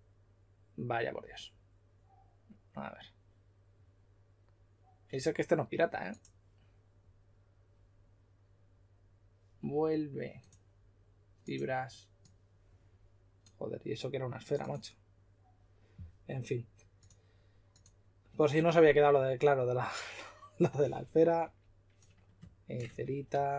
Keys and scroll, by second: 21.4 typing, 22.8-23.3 typing.